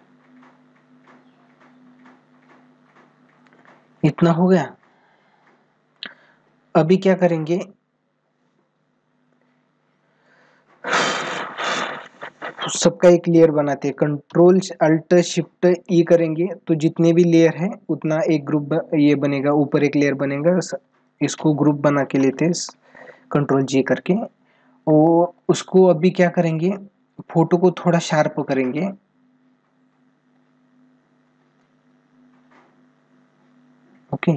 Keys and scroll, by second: 0.2 ], 2.1 ctrl+-, 7.4 ctrl+-, 8.8 ctrl+=.